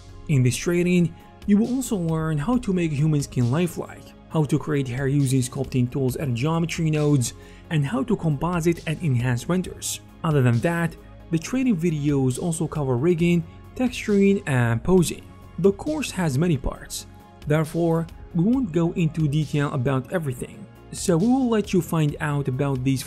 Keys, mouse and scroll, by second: 0.0-0.1 typing, 4.4 ctrl+z, 4.4 alt+click, 4.4 alt+middle click, 4.4-5.5 alt+right drag, 4.8 alt+c, 4.8 f, 5.0-6.0 drag, 5.0 middle click, 5.0 f, 5.3 ctrl+z, 11.2-12.7 alt+shift+drag, 11.6 shift+KP_1, 12.7 ctrl+alt+shift+middle click, 13.3 alt+x, 13.6 ctrl+z, 13.6 click, 13.7 middle click, 13.8-15.4 ctrl+drag, 13.9 f, 14.0 f, 14.3 ctrl+z, 15.1 f, 15.6-22.8 drag, 18.4 ctrl+z, 18.4 shift+f, 22.2 ctrl+z, 22.8 middle click, 22.8 f.